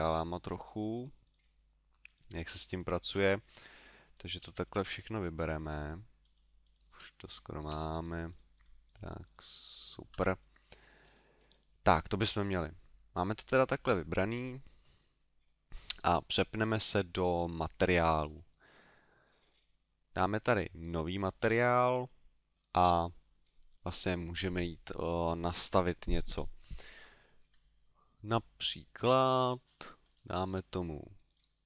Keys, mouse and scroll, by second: 0.6 shift+right click, 2.1 shift+right click, 2.3 shift+right click, 2.8 shift+right click, 3.3 middle click, 4.1 middle click, 4.6 shift+right click, 4.8 shift+right click, 5.5 shift+right click, 5.8 shift+right click, 5.9 shift+right click, 6.2 shift+right click, 6.6 shift+right click, 7.2 middle click, 8.0 shift+right click, 8.3 shift+right click, 8.4 shift+right click, 8.6 shift+right click, 8.9 shift+right click, 9.2 shift+right click, 10.4 middle click, 11.0 scroll down 3, 11.5 middle click, 11.5-12.2 scroll down 1, 12.2 middle click, 18.2 click, 20.8 click, 22.1 middle click, 30.1 click, 31.2 click.